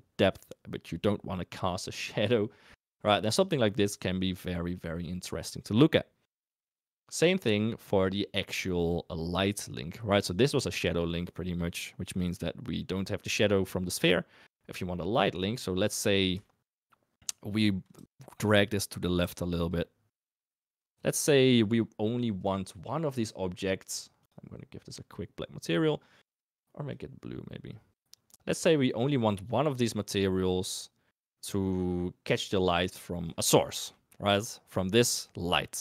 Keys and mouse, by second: 16.4 shift+middle drag, 17.9 g, 18.7 middle click, 19.3 g, 19.8 middle drag, 20.8 g, 24.2 click, 33.5 shift+middle click, 33.9 middle click.